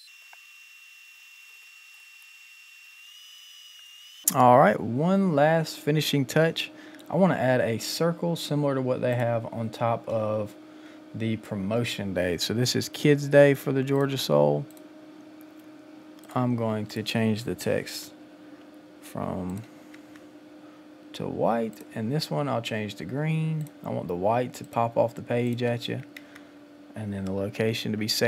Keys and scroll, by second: 18.0 ctrl+a, 26.2 Return.